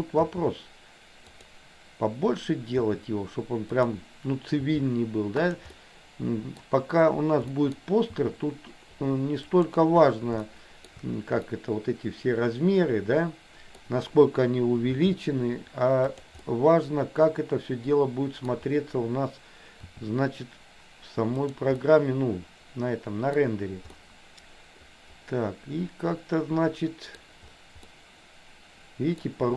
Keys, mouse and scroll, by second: 0.3 s, 2.9 s, 4.8 g, 5.9 middle click, 7.5 middle click, 8.3 g, 10.5 middle click, 11.6-14.0 middle drag, 15.0 g, 16.5-18.7 middle drag, 20.0 r, 21.9-23.5 middle drag, 24.0-27.3 middle drag, 28.0-29.3 middle drag.